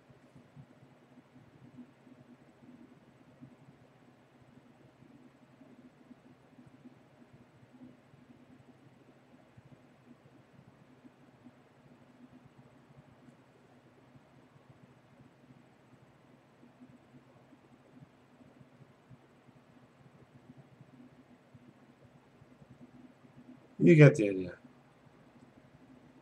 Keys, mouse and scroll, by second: 0.1 click, 0.8 click, 2.4 click, 3.7 click, 5.0 click, 6.4 click, 7.7 click, 8.8 click, 9.8 click, 11.1 click, 12.3 click, 12.6 click, 13.0 click, 16.9 click, 18.5 click, 20.3 click, 21.4 click, 24.7 click, 25.3 ctrl+z.